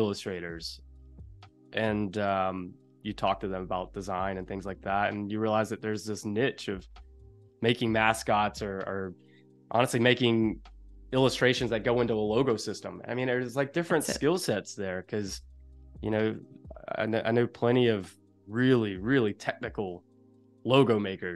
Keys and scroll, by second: 2.2 v, 4.5 a, 9.9 super+z, 16.0 z, 16.5 a, 19.3 super+-.